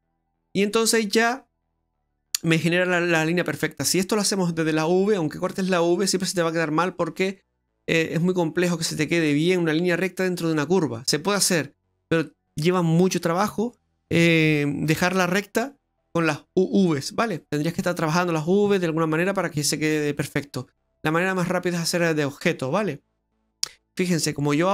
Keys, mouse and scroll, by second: 0.1 scroll down 2, 0.3 middle click, 1.7 middle click, 2.9 middle click, 10.6 middle click, 22.6 middle click, 23.6-24.2 scroll up 9, 24.2 middle click.